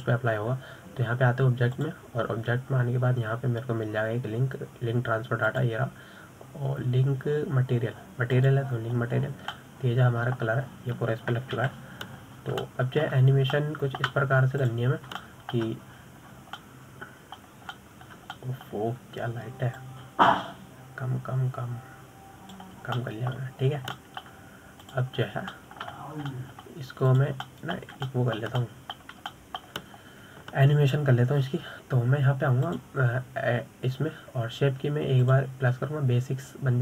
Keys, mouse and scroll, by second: 0.1-3.2 middle drag, 4.1-7.3 drag, 11.5-11.9 scroll down 4, 11.9-13.0 middle drag, 13.0-13.9 scroll down 4, 13.9 KP_7, 14.6-15.0 scroll up 5, 15.0-17.0 shift+middle drag, 17.0 drag, 17.6-18.7 shift+middle drag, 18.7-19.0 scroll up 3, 19.0-22.2 middle drag, 22.2-25.2 drag, 25.4-26.1 middle drag, 26.1 scroll down 2, 26.4-27.2 shift+middle drag, 27.2 drag, 27.5-28.7 scroll up 6, 27.9-28.3 shift+middle drag, 28.7-29.5 shift+middle drag, 29.5 drag, 29.7 scroll up 1, 29.8-34.8 middle drag, 35.0 click.